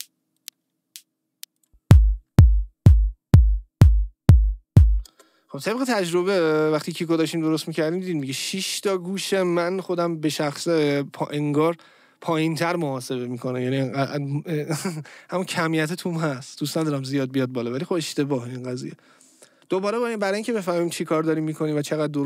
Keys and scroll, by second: 5.1 space, 20.0 Caps_Lock.